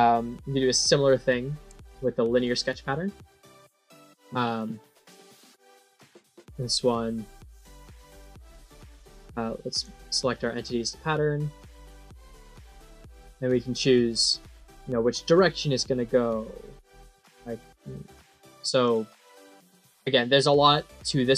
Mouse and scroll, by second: 1.2 middle click, 2.2 click, 8.7 click, 9.6 click, 10.4 click, 11.5 click, 12.2 click, 13.4 scroll down 5, 14.2 scroll up 2, 16.2 click, 17.0 click, 17.5 click, 18.1 click, 18.7 click, 19.3 click.